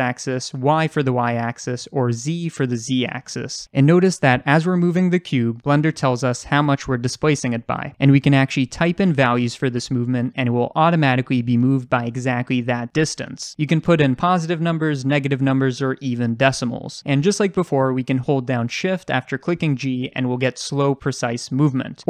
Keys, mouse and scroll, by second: 11.5 Return, 12.5 g, 16.0 Return, 17.5 g.